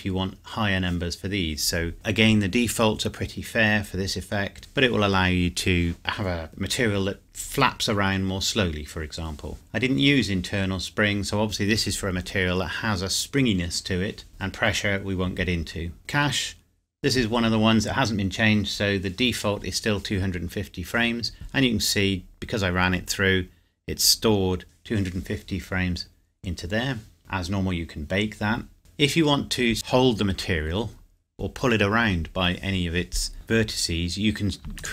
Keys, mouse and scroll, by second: 9.5-11.3 scroll down 1, 14.3 click, 16.0 click, 17.5 scroll down 1, 27.2-27.7 scroll down 1, 28.8 click, 29.7 scroll down 1, 30.5-32.2 scroll up 1, 33.3 Tab, 34.8 alt+click.